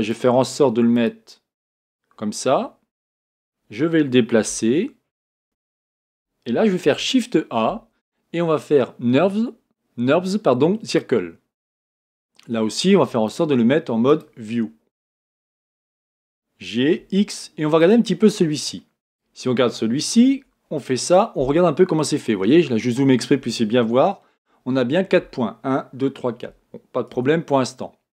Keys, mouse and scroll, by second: 3.2 g, 6.8 shift+a, 13.2-16.0 drag, 16.0 g, 19.0 click, 20.3 Tab, 21.1 scroll up 1, 21.7-24.4 scroll up 2, 27.1 Tab.